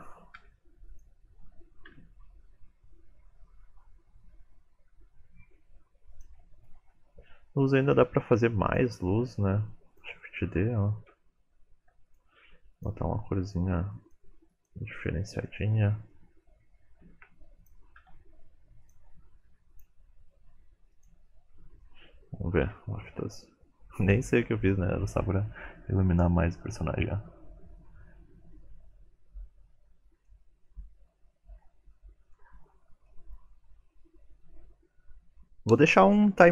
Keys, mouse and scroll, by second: 0.3 r, 6.6-7.1 scroll down 8, 7.1 middle click, 8.1 shift+d, 9.2 r, 10.2 middle click, 11.1 KP_1, 11.8 r, 12.7 click, 15.4 middle click, 17.1 shift+d, 18.0 r, 19.7 click, 21.8 middle click.